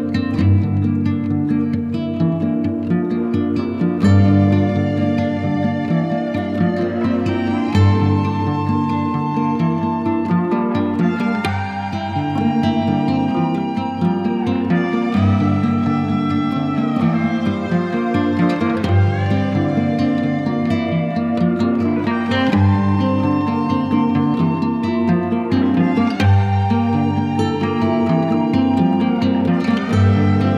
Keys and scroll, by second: 3.7 shift+F2, 13.2 1, 13.4 0, 13.6 Return, 15.3 KP_Add, 16.3 F3, 17.9 ctrl+z, 21.3 1, 21.5 5, 21.7 Return, 25.6 ctrl+Page_Down, 30.0 1, 30.4 3.